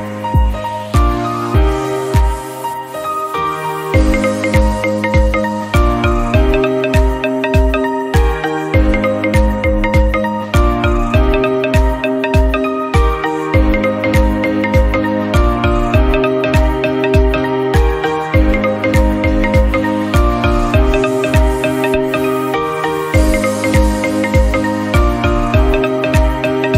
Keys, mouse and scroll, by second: 0.1 middle click, 0.5 scroll up 1, 0.9-1.9 shift+drag, 2.8 ctrl+x, 3.1-4.3 middle drag, 4.3 scroll down 1, 4.6 middle click, 5.2-5.7 scroll up 1, 5.7 Tab, 5.9 scroll down 1, 6.1 click, 6.2-7.0 middle drag, 7.0 scroll up 1, 7.2-7.7 shift+middle drag, 7.7-8.2 scroll down 2, 8.3 shift+middle click, 8.5-9.2 scroll up 4, 8.8 shift+middle drag, 9.2 click, 9.6 Tab, 9.8-10.9 middle drag, 10.9 shift+click, 11.5 3, 11.7 click, 11.9 shift+click, 12.7-13.1 scroll up 1, 13.1 shift+middle click, 13.5 shift+click, 14.6-15.8 drag, 16.4 Tab, 16.6 click, 16.8-17.4 middle drag, 17.4 scroll down 1, 17.5-18.5 middle drag, 18.5 scroll up 2, 18.8 Tab, 19.0-20.7 middle drag, 20.7 click, 21.4 2, 21.6 click, 22.6-23.6 drag, 23.6 Tab, 23.9 click, 24.1-24.5 scroll down 5, 24.5 shift+middle click, 24.6 scroll up 1, 24.9 middle click, 25.0 Tab, 25.2 scroll up 1, 25.5-26.7 drag.